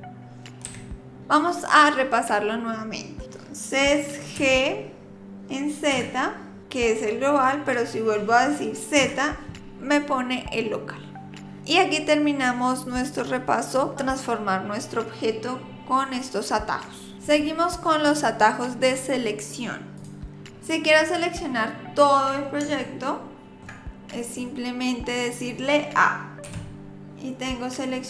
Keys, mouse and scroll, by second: 4.4 g, 20.0 click, 20.5 scroll up 1, 20.6 scroll down 8, 22.7 shift+middle click, 26.5 a.